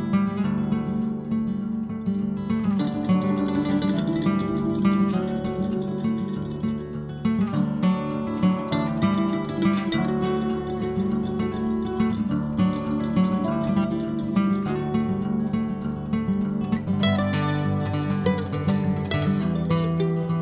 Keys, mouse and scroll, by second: 0.9 middle click, 1.4-4.2 drag, 4.2 middle click, 4.6-6.3 drag, 6.3 middle click, 6.8 click, 7.1 middle click, 7.8-9.7 drag, 9.7 middle click, 10.1-11.1 drag, 11.1 middle click, 11.7 click, 12.5-13.6 middle drag, 13.6 click, 14.3 middle click, 14.9-15.4 scroll down 1, 15.4 click, 15.9-17.4 middle drag, 18.2-19.3 scroll up 1, 19.3 KP_1, 20.0-20.4 middle drag.